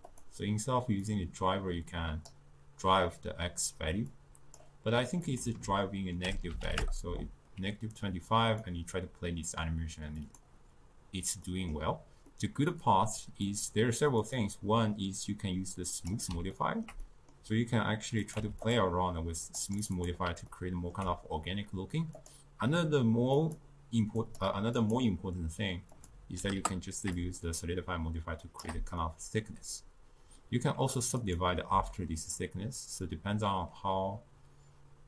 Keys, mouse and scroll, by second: 1.1-8.3 drag, 8.5 click, 11.5-12.7 middle drag, 12.7-13.5 scroll down 2, 13.5 click, 14.1 scroll up 2, 16.2-16.6 drag, 16.6-18.3 ctrl+middle drag, 18.3 click, 19.5-20.5 drag, 20.5-22.2 ctrl+middle drag, 22.7-29.1 drag, 29.1-31.3 middle drag, 31.3 click, 32.2-35.0 middle drag.